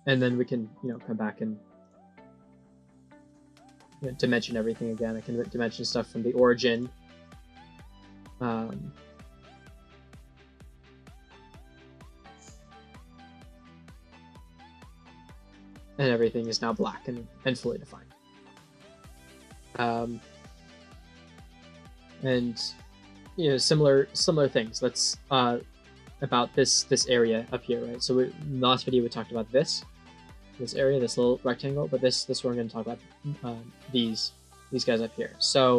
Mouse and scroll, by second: 0.7 click, 1.7 click, 2.4 click, 4.9 click, 5.6 click, 6.6 click, 10.1 click, 10.8 click, 11.6 click, 13.6 click, 14.2 click, 15.6 right click, 16.3 click, 16.6 click, 17.8 middle click, 19.0 middle click, 35.6-35.7 scroll up 2.